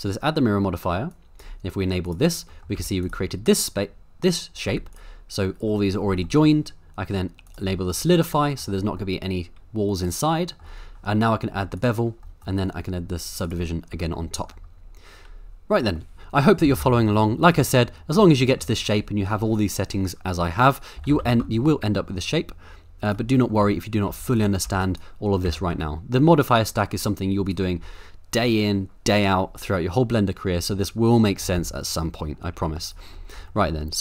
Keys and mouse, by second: 2.0 click, 2.5 middle click, 2.8 z, 4.6 z, 6.2 middle click, 7.4 click, 8.1-8.7 middle drag, 9.0-10.7 middle drag, 11.8 click, 12.3 middle click, 13.5 click, 14.1 shift+middle click, 16.1 middle click, 16.6 g, 16.8 y, 17.4 right click, 18.2 middle click, 21.0 g, 21.1 y, 23.4 middle click, 23.6 Tab, 24.1 z, 24.7 1, 24.9 click, 25.5 g, 25.7 z, 26.4 click, 27.5 click, 31.6 Tab, 32.2 middle click, 32.6 z, 33.3 middle click, 33.5 shift+middle drag.